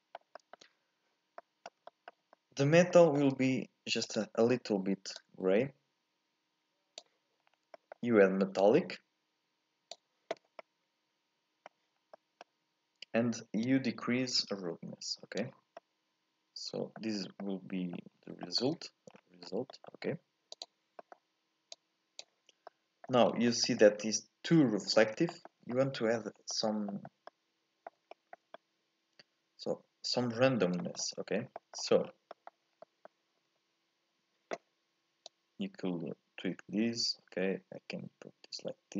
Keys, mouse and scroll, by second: 0.9-1.4 scroll up 2, 1.4-4.0 middle drag, 4.0 click, 7.4-7.7 scroll up 2, 7.7 middle click, 8.6-10.6 drag, 10.6-12.0 middle drag, 12.0 scroll up 1, 12.1-13.6 middle drag, 13.6-15.8 drag, 15.8-17.1 middle drag, 17.1 scroll up 2, 17.4 middle click, 18.1-18.4 scroll down 1, 18.4 shift+middle click, 19.1-19.7 scroll down 5, 19.7 middle click, 20.0-20.5 scroll up 2, 20.5 click, 21.0 middle click, 21.7 click, 22.7 middle click, 23.2 scroll up 1, 23.5-25.0 shift+middle drag, 25.0 scroll down 3, 25.3 shift+middle click, 25.6 scroll up 2, 25.7 middle click, 26.3 scroll up 1, 26.5-31.4 middle drag, 31.4 scroll down 1, 31.5 shift+middle click, 32.1 scroll down 1, 32.3 middle click, 32.7 scroll up 1, 32.8-35.2 middle drag, 35.2-38.3 drag.